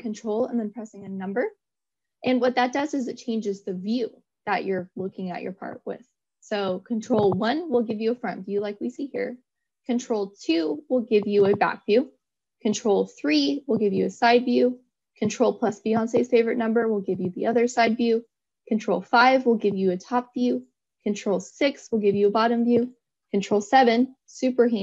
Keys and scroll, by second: 0.3 ctrl+1, 9.6 ctrl+2, 13.0 ctrl+3, 15.8 ctrl+4, 19.1 ctrl+5, 21.7 ctrl+6, 23.9 ctrl+7.